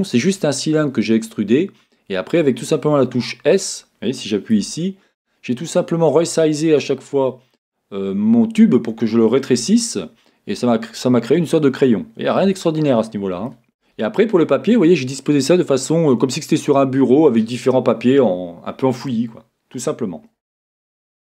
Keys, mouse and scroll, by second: 0.4 scroll up 1, 3.5 click, 4.5 Tab, 11.4-12.4 scroll down 1, 12.4 Tab, 12.8-13.5 scroll down 1, 13.5-21.2 shift+middle drag, 13.6-14.4 scroll up 2, 20.3-21.2 scroll down 3.